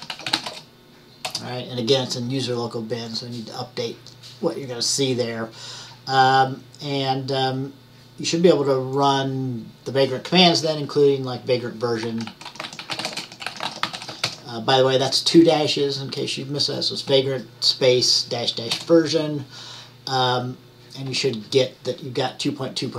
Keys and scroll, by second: 0.0-1.1 typing, 12.1-15.0 typing.